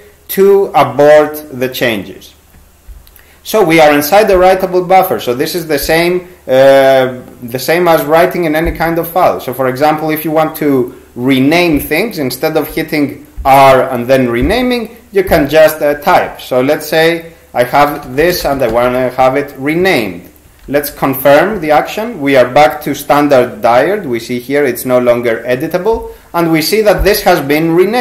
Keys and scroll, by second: 16.1 Right, 17.7-19.4 typing, 20.7 ctrl+c, 20.9 ctrl+c.